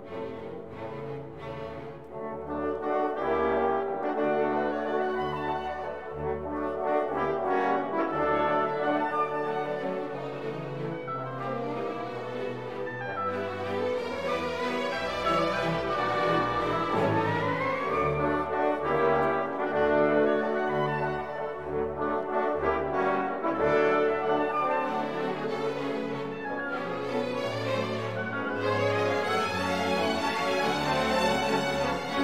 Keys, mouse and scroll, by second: 0.5-1.0 scroll down 2, 1.3 scroll up 2, 3.1 click, 3.9 1, 4.2 5, 5.4 click, 7.6 scroll down 1, 8.1-8.6 scroll up 1, 12.7 click, 14.0 click, 15.8 click, 18.9 click, 20.4 click, 21.3 click, 22.9 click, 24.0 9, 25.3 click, 26.6-26.9 scroll down 2, 27.7-28.1 scroll up 2, 29.2 click, 30.8 click.